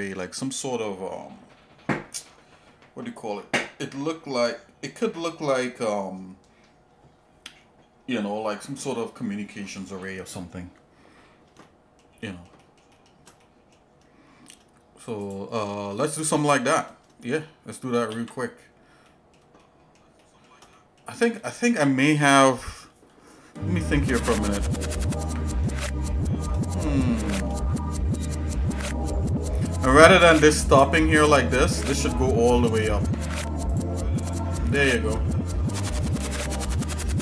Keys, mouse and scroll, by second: 11.6 shift+middle click, 12.2 shift+middle click, 12.6 shift+middle click, 12.9 shift+middle click, 13.4 middle click, 14.4 shift+scroll up 1, 15.2 click, 16.4 shift+middle click, 18.2 ctrl+s, 19.0 middle click, 19.6 shift+middle click, 20.2 shift+middle click, 20.7 middle click, 25.8 shift+middle click, 27.0 shift+middle click, 27.7 middle click, 28.7 shift+middle click, 30.0 click, 30.3 Tab, 30.7 click, 31.5 Tab, 32.2 shift+middle click, 33.1 ctrl+Tab, 34.2 click, 36.2 ctrl+KP_Add.